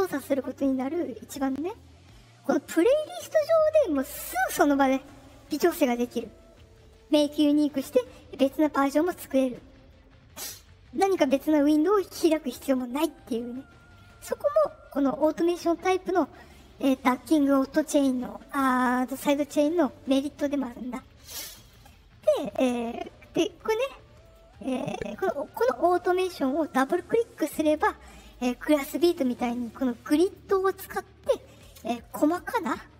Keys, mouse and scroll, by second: 0.8 middle click, 7.1 middle click, 11.6 middle click, 13.0 middle click, 21.4 click, 21.6 click, 24.2 click, 26.6 click, 26.7 click, 27.7 click, 29.9 click, 30.2 click.